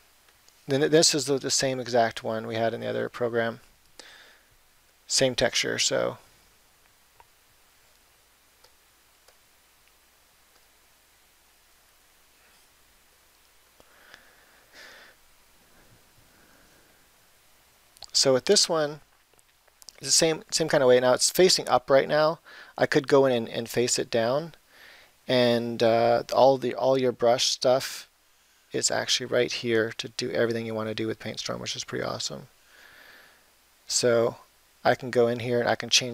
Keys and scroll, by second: 17.1 [, 18.5 ].